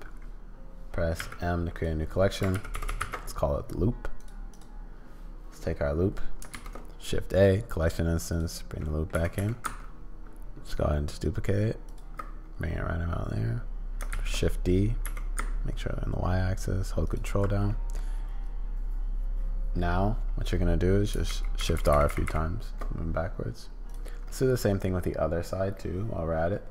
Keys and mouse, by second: 1.1 m, 2.8 shift+o, 6.5 shift+a, 8.8 click, 9.2 g, 14.1 shift+d, 17.7 middle click, 21.3-22.8 typing, 23.8 click.